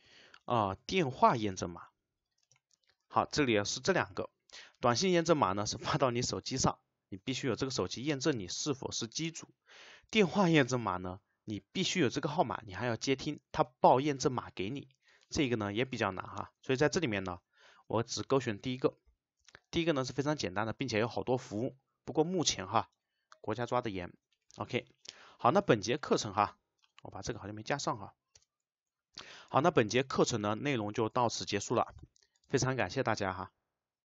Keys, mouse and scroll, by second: 0.1 shift+;, 1.4 space, 8.5 click, 10.2 click, 18.7 click, 27.8 click, 28.5 Return, 29.4 click, 31.7 click.